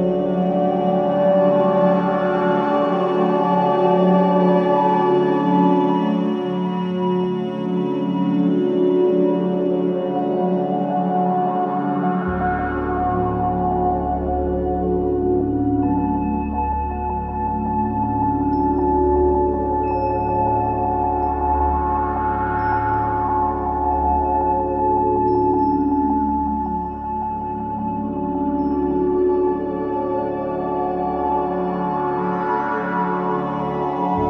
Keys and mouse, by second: 4.7-5.0 alt+drag, 5.6-10.0 alt+drag, 10.1 typing, 10.7-13.8 ctrl+alt+drag, 12.7 typing, 13.9-15.3 drag, 15.6-19.5 typing, 20.4 click, 22.3 click, 23.1 click, 23.1 typing, 24.0 click, 26.3 typing, 28.7-30.4 alt+drag, 31.6-32.3 typing, 31.7 click, 32.2-33.6 alt+drag, 34.0-34.2 typing.